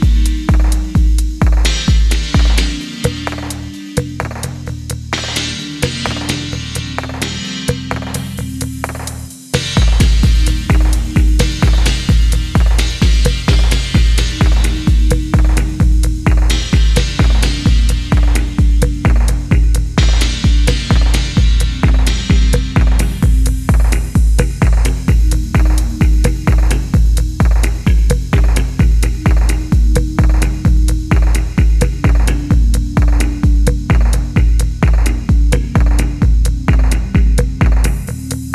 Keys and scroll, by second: 3.0 0, 3.1 Tab, 3.2 0, 3.3 Tab, 3.4 0, 3.5 Return, 6.1 r, 9.4 g, 11.7-12.1 typing, 13.2 typing, 16.3 alt+h, 17.1 Tab, 19.3 typing, 21.2 typing, 22.4-23.1 typing, 25.7 ctrl+z, 25.9-26.6 typing, 29.4 Tab, 29.7 7, 31.2-32.9 typing, 34.2 typing.